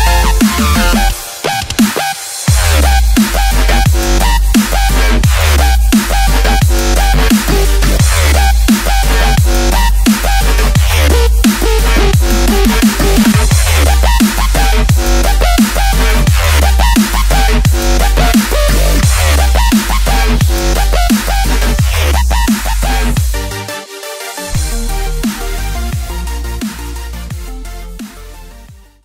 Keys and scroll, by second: 0.2 space, 0.7 alt+super+space, 0.8 alt+super+space, 0.9 alt+super+space, 1.0 alt+super+space, 1.1 alt+super+space, 1.2 alt+super+space, 1.2 alt+super+space, 1.3 alt+super+space, 1.9 alt+super+space, 2.3 alt+super+space, 2.8 alt+super+space, 3.7 super+space, 3.8 super+space, 3.9 super+space, 4.1 super+space, 4.2 super+space, 4.3 super+space, 4.8 super+space, 7.9 space, 8.4 space, 8.5 space, 10.7 space, 11.2 alt+super+space, 11.3 alt+super+space, 11.4 alt+super+space, 11.5 alt+super+space, 11.7 alt+super+space, 12.6 super+space, 12.7 super+space, 12.7 super+space, 12.8 super+space, 14.0 space, 14.5 alt+super+space, 14.6 alt+super+space, 14.8 alt+super+space, 14.9 alt+super+space, 15.0 alt+super+space, 15.0 alt+super+space, 15.3 alt+super+space, 16.2 super+space, 16.3 super+space, 16.8 super+space, 17.0-17.8 typing, 20.5 typing, 23.2-24.3 typing.